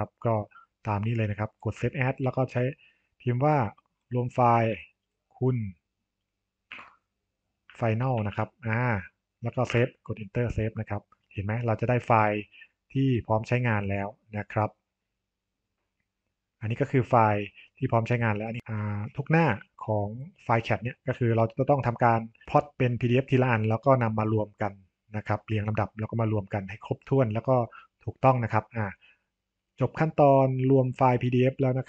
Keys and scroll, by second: 6.6 space, 9.6 Return, 9.8 Return.